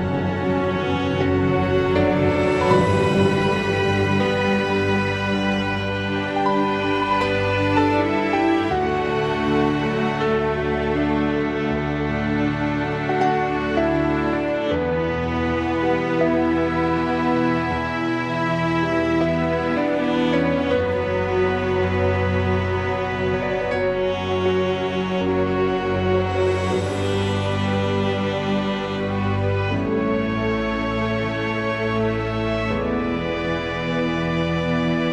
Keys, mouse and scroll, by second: 0.4 g, 2.2 click, 3.5 shift+click, 3.7 shift+click, 4.2 g, 5.0 click, 5.7 shift+click, 6.3 shift+click, 7.9 g, 9.7-10.8 drag, 11.2 g, 12.7 click, 12.9 g, 13.8 click, 14.0 g, 17.9 click, 18.6 g, 19.2 click, 19.5 g, 21.0 click, 21.1 g, 22.5 click, 22.6 g, 24.7 click, 26.1 shift+click, 26.7 shift+click, 27.1 click, 27.8 e, 29.2 click, 30.2 click, 31.2 click, 32.6-33.6 drag.